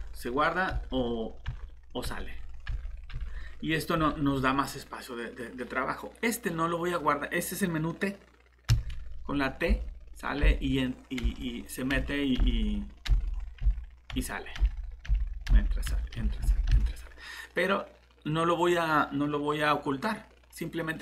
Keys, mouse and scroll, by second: 0.0-3.9 typing, 8.7-16.7 typing.